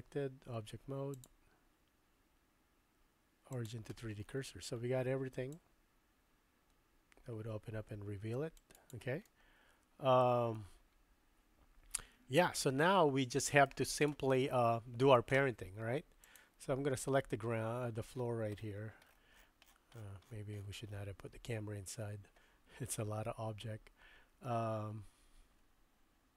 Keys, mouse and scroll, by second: 0.1 Tab, 1.2-3.8 drag, 5.6-9.0 drag, 9.3-10.3 middle drag, 10.6-12.7 middle drag, 13.0-13.7 shift+middle drag, 16.2 click.